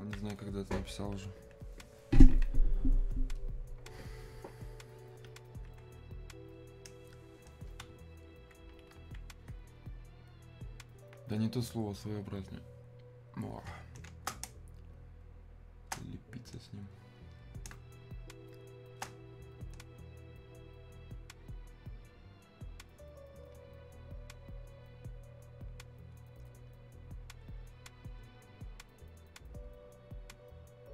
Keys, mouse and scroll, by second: 3.4-13.5 alt+drag, 14.1 space, 15.2 click, 15.4 space, 16.9 click, 17.7 space, 19.6-30.9 drag.